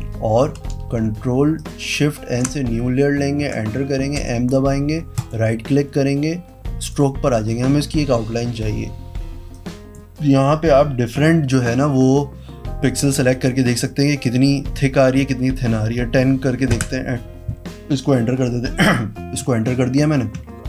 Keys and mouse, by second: 1.5 click, 2.3 ctrl+shift+n, 4.1 ,, 5.1 right click, 6.7 click, 9.5 click, 13.3 click, 13.8 click, 16.7 KP_Enter, 20.5 ctrl+d.